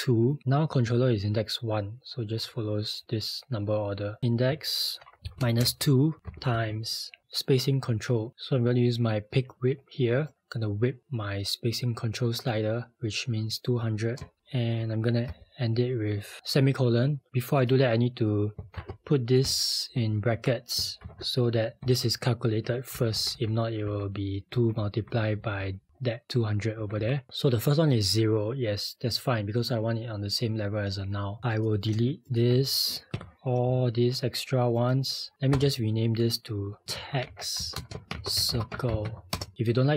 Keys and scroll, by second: 20.1-21.0 typing, 21.8-22.6 Right, 22.9 Left, 22.9-23.9 typing, 23.2 Left, 23.3 Left, 23.9 Left, 33.1 Delete, 35.5 Return, 36.6-39.6 typing.